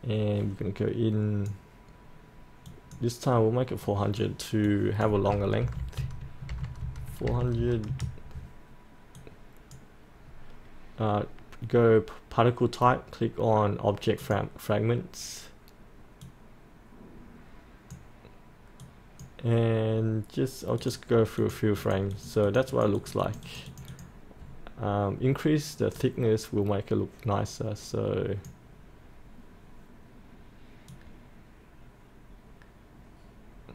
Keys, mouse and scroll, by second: 5.7-7.4 typing, 6.2 Tab, 7.1 Tab, 9.1-33.7 drag.